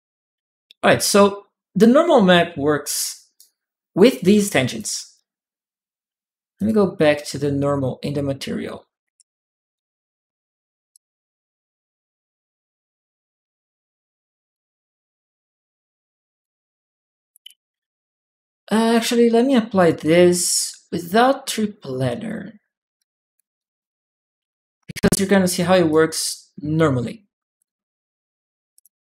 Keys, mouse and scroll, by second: 3.1 middle click, 3.9 click, 3.9-4.9 right drag, 6.3 click, 7.4 click, 8.8 middle click, 9.5 click, 10.7-12.0 drag, 14.2 click, 16.1 click, 18.6 click, 19.6 click, 19.8 right click, 21.3 click, 21.8 click, 22.7 click, 23.3 click, 24.1 ctrl+w, 24.9 click, 25.7 ctrl+click, 25.7 right click, 27.4 click, 28.5 click.